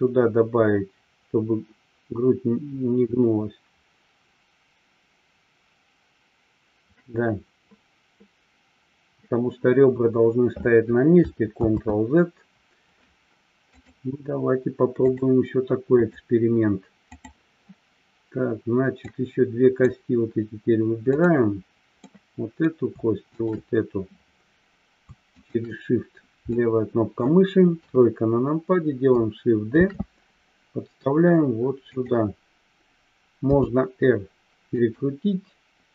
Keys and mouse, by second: 12.1 ctrl+z, 13.9-15.3 drag, 16.1-17.7 drag, 19.1 click, 21.2 click, 22.1 middle click, 26.6-27.2 middle drag, 27.8 KP_3, 29.8 shift+d, 31.8 click, 34.8 click.